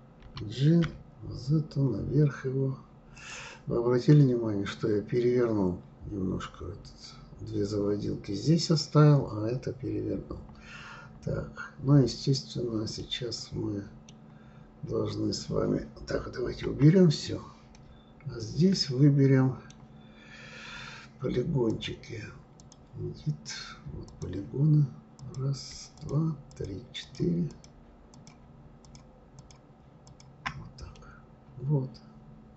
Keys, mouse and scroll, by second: 0.2 g, 3.6-5.0 scroll down 3, 10.3-12.7 scroll up 10, 13.0-15.9 middle drag, 16.6 KP_Divide, 17.7-20.7 middle drag, 21.7-24.2 drag, 25.2 click, 25.9 shift+click, 26.5 shift+click, 27.0 shift+click, 27.5 shift+click, 28.1 shift+click, 28.8 shift+click, 29.3 shift+click, 30.0 shift+click, 30.9-32.5 middle drag.